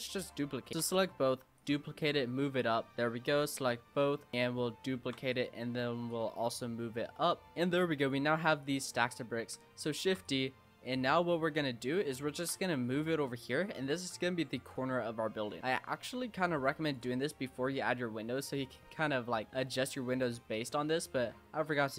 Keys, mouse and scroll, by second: 0.3 l, 0.7 shift+d, 1.6 click, 3.3 l, 3.6 l, 3.9 scroll down 1, 3.9-5.0 middle drag, 5.0 shift+d, 6.1 click, 7.5-8.0 middle drag, 8.0 click, 8.6 click, 10.0 shift+d, 11.3 click, 12.1-12.6 shift+middle drag, 12.6 g, 13.3-14.0 shift+middle drag, 14.0 g, 14.9-15.6 shift+middle drag, 15.6 click, 17.1 Tab, 17.5 scroll up 1, 17.6 Tab, 17.9-18.8 middle drag, 18.8-19.4 scroll down 3, 19.4 scroll up 3, 19.7-20.4 middle drag, 20.4 scroll up 1, 20.4-20.9 middle drag, 20.9 Tab.